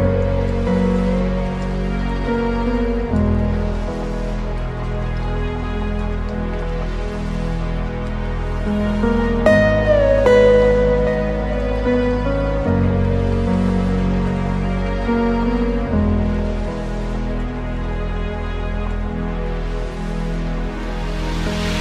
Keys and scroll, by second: 9.3 ctrl+space, 20.9 ctrl+alt+space.